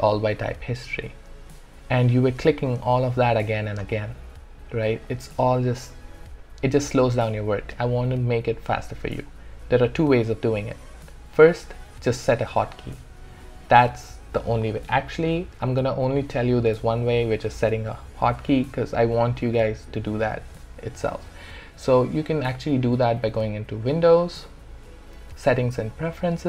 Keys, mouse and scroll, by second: 0.3 click, 3.2 click, 22.3 click.